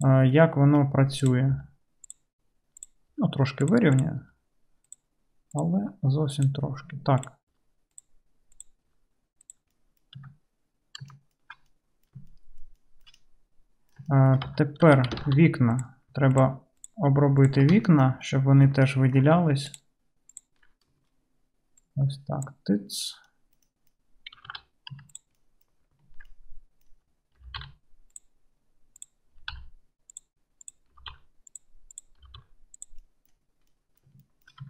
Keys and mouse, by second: 0.0 middle click, 0.0 right click, 0.7-5.9 right drag, 1.2 click, 1.2 middle click, 1.6 g, 2.8 click, 2.8 middle click, 3.2 g, 3.9 click, 3.9 middle click, 5.5 click, 5.5 middle click, 5.9-11.5 drag, 5.9 g, 7.6 g, 8.9 g, 10.3 Tab, 11.5-13.4 shift+middle drag, 13.4-18.3 drag, 14.6 Tab, 15.0 2, 15.3 alt+z, 16.4 ctrl+middle click, 16.4 ctrl+right click, 18.3 right click, 18.7 shift+click, 19.1 shift+right click, 19.7 ctrl+middle click, 19.9 ctrl+right click, 20.4 ctrl+middle click, 20.5-21.9 ctrl+right drag, 21.9-25.3 middle drag, 24.5 alt+z, 25.0 1, 25.3 click, 25.5 right click, 25.6 click, 27.4 g, 29.0 middle click, 29.4 g, 30.7 middle click, 31.0-33.4 drag, 31.0 g, 32.3 g, 33.4 right click, 33.8 click, 34.0 right click, 34.1 shift+click, 34.2 shift+middle click, 34.6 shift+click.